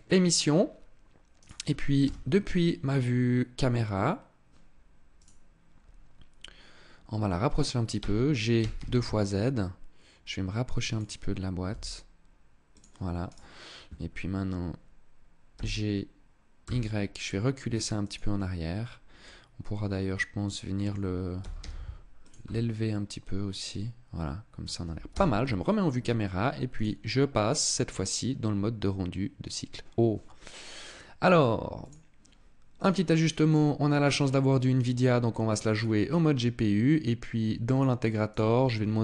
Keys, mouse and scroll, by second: 1.0 right click, 1.7 KP_0, 4.8 right click, 7.6 g, 10.7 click, 11.4 g, 12.4 click, 12.9 right click, 15.2 g, 17.8 click, 18.9 middle click, 21.0 g, 22.0 click, 22.2 middle click, 24.8 KP_0, 26.4 click, 31.5 click, 32.4 click, 35.4-37.4 scroll down 9, 37.4 click, 38.0 click.